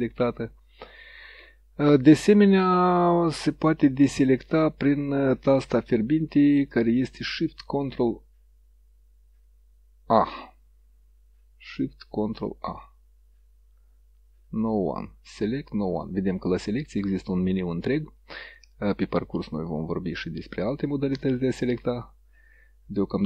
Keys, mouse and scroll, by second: 2.3 click, 6.8 click.